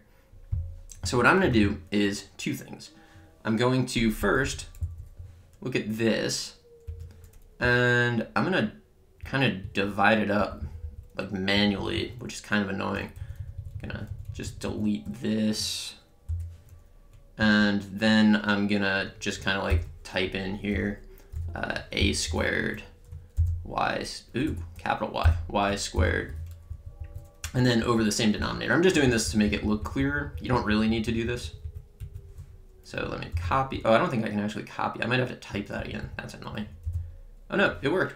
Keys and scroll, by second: 4.2 Up, 4.8 Down, 6.9 Return, 7.6 Left, 9.6 Right, 10.4 Left, 11.5 Right, 16.3 BackSpace, 17.4 Right, 20.9-22.3 typing, 22.6 Right, 23.7-26.2 typing, 26.7 Down, 27.4 Left, 33.7 c, 33.8 Right, 37.2 v.